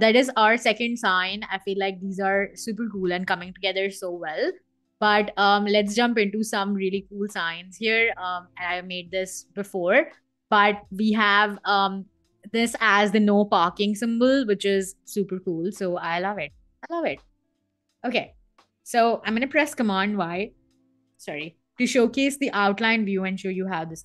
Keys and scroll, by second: 19.4 super+y.